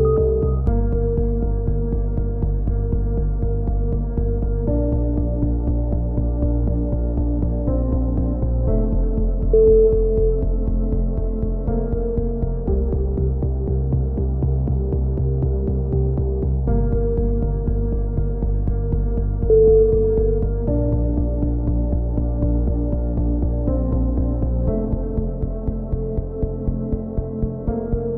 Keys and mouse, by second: 1.1-3.8 typing, 5.3-6.7 drag, 6.6 a, 6.7 z, 7.0 Tab, 7.4-8.4 middle drag, 8.7-9.3 middle drag, 9.8 middle click, 10.4-10.9 drag, 16.3 Tab, 20.4-20.9 drag, 26.0 KP_7, 26.2 z, 26.7-27.0 drag, 27.0 z, 27.3 z.